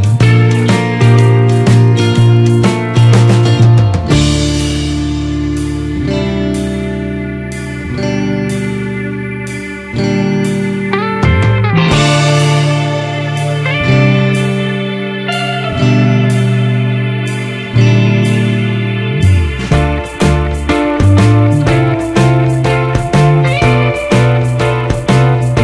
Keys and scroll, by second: 1.6 ctrl+z, 4.8 ctrl+=, 7.2 ctrl+z, 9.1 Return, 12.7 ctrl+z, 19.8 ctrl+z, 21.8 Return, 24.9 ctrl+-, 25.5 ctrl+z.